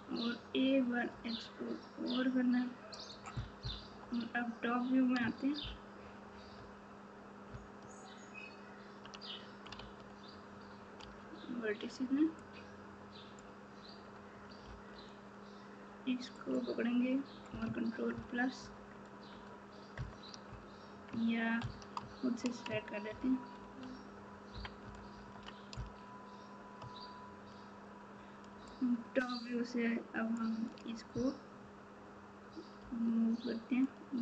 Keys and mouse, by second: 1.1 e, 3.8 KP_7, 5.6 ctrl+KP_8, 7.5 ctrl+KP_6, 9.7 alt+z, 11.0 1, 18.1 ctrl+KP_Add, 28.8-30.3 shift+drag.